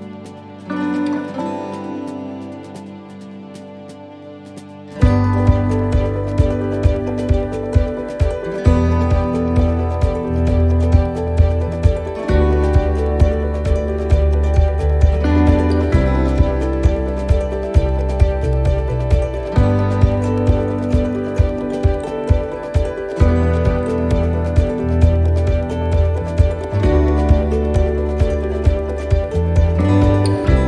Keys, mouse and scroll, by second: 0.1 click, 1.5 middle click, 1.8-2.4 scroll down 4, 2.4 middle click, 2.9 shift+middle click, 3.3 scroll up 2, 3.4 middle click, 3.9 middle click, 6.0 click, 7.1 right click, 7.8 shift+right click, 8.1 right click, 9.7 right click, 10.0 shift+middle click, 10.7 shift+right click, 11.7 shift+right click, 12.0 middle click, 13.5 shift+right click, 14.6 shift+right click, 15.0 shift+right click, 17.6 shift+right click, 17.6 middle click, 19.4 e, 20.2 s, 22.1 middle click, 23.3-23.9 scroll down 4, 23.9 shift+middle click, 24.3 scroll up 2, 24.7 middle click, 25.0-25.3 scroll down 1, 25.5 middle click, 26.3 scroll up 2, 27.0 shift+middle click.